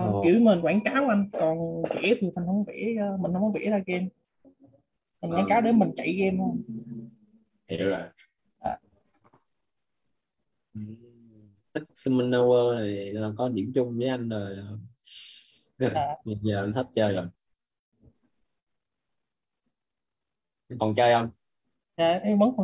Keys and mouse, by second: 1.4-3.1 typing, 5.7 click, 10.2 click, 17.3 click.